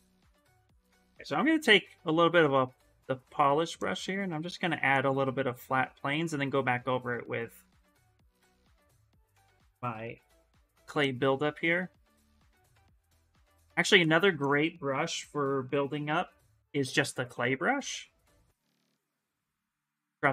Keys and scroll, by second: 0.4 b, 0.9 p, 8.5-10.2 typing, 12.5 ctrl+z, 12.8 s, 13.3 ctrl+z, 13.7 ctrl+z, 14.7 b, 15.5 c, 15.8 l, 16.6 s, 18.1 ctrl+z, 18.3 space.